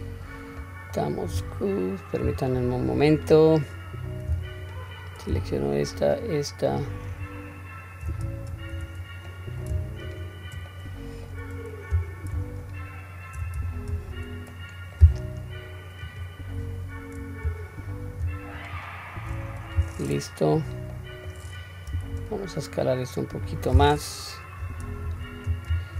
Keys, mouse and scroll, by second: 0.6 middle click, 1.4 q, 3.1 click, 4.6 alt+click, 5.9 alt+shift+click, 7.1 alt+shift+click, 8.6 ctrl+z, 9.3 middle click, 10.1 shift+click, 10.7 middle click, 12.6 alt+shift+click, 13.9 ctrl+z, 14.5 middle click, 16.1 click, 18.6 alt+shift+click, 19.6 middle click, 20.9 middle click, 21.9 s, 24.9 ctrl+z, 25.7 alt+s.